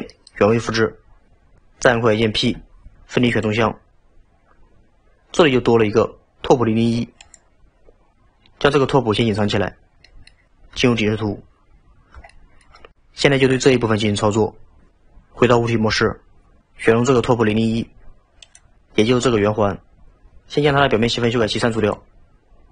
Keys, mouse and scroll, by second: 7.2 click, 9.5 click, 10.0-10.8 middle drag, 10.8 KP_7, 11.8 scroll up 2, 12.3-14.4 shift+middle drag, 15.9 Tab, 18.5 click, 21.9 click.